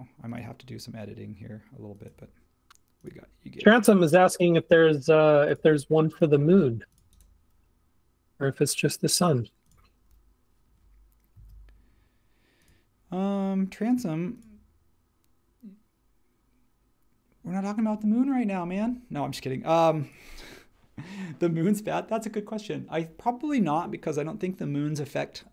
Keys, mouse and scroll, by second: 6.4 space, 11.3 a, 18.8 space.